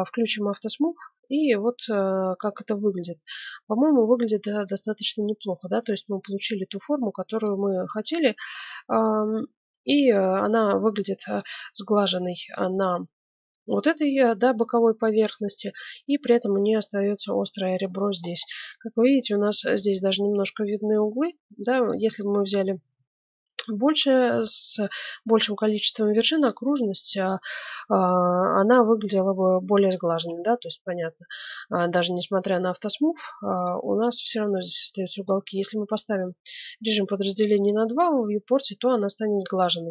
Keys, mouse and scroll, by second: 0.9-2.2 middle drag, 3.8-10.7 middle drag, 12.1-14.5 middle drag, 15.0-16.6 middle drag, 17.3-18.2 scroll down 1, 18.2-20.9 middle drag, 21.1-21.6 scroll up 1, 21.6 middle click, 23.0 middle click, 26.5-28.2 middle drag, 29.0-33.5 middle drag, 33.5-35.3 drag, 37.5-39.4 drag, 38.1-39.9 middle drag.